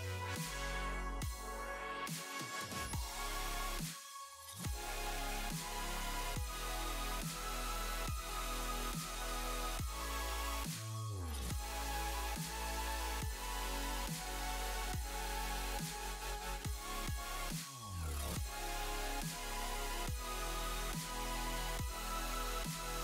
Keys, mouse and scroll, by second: 9.1 space, 11.6 click, 12.4 click, 14.2 space, 14.7 space, 15.3 click, 15.7 space, 17.5 KP_0.